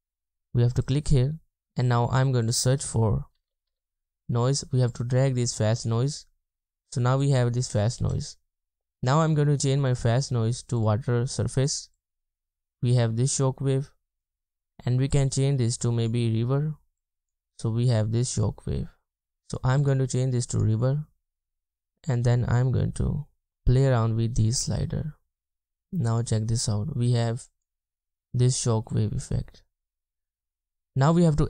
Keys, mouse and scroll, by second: 3.4-3.7 typing, 6.6 typing, 17.5 typing, 25.7 typing.